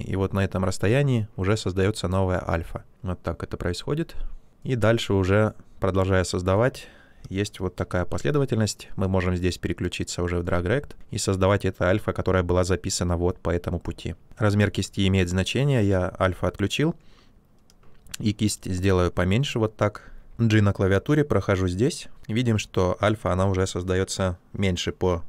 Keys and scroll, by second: 7.9 ctrl+z, 17.7 space, 20.3 g.